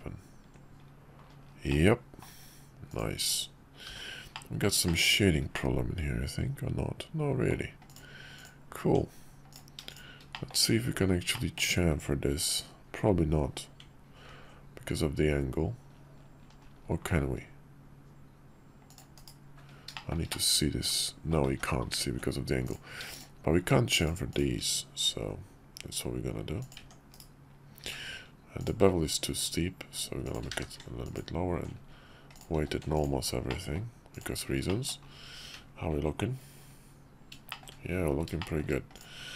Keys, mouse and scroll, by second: 1.7-2.3 middle drag, 2.9 click, 3.8 h, 4.3-4.7 middle drag, 4.8 shift+middle drag, 5.5-7.5 middle drag, 7.9 click, 8.3 click, 8.9 Tab, 9.9 shift+click, 10.3 middle click, 11.3 middle click, 14.3 ctrl+b, 19.1 /, 20.0 shift+middle click, 20.3-21.3 middle drag, 21.5 ctrl+z, 22.2 ctrl+z, 22.6 click, 23.1 shift+click, 24.0 shift+click, 25.1 ctrl+b, 26.8 Tab, 27.1 /, 27.8 q, 30.5 q, 32.3 click, 32.6 q, 33.5-33.8 middle drag, 34.1 click, 34.7 drag, 35.4 `, 37.5 shift+drag, 38.4 shift+click.